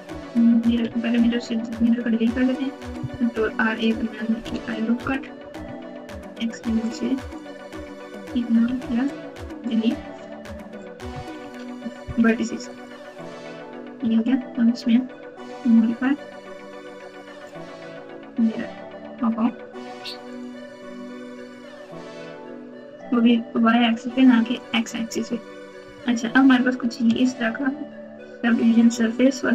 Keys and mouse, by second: 0.8 Tab, 3.3 ctrl+r, 5.6 1, 6.6 alt+z, 7.6 click, 8.6 x, 11.4 ctrl+z, 12.1 x, 13.9 Tab, 15.4-17.4 drag, 20.3 click, 23.8 click, 24.5 click, 25.9 alt+z, 27.2 s.